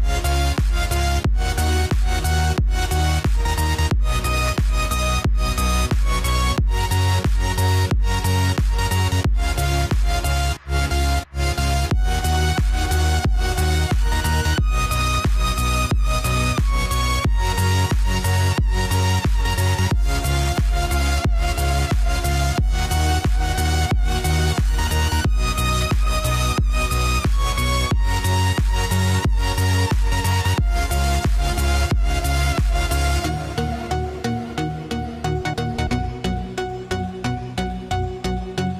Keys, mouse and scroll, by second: 0.1 ctrl+d, 1.4 click, 2.4 right click, 2.7 click, 2.9 right click, 3.9 click, 8.1-11.2 drag, 14.7 ctrl+j, 16.7 click, 24.1-38.7 drag.